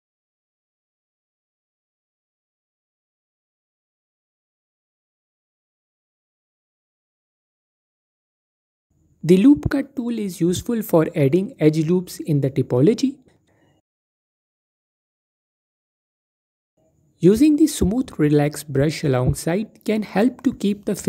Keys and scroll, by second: 1.5 typing, 5.1 typing, 11.9 typing.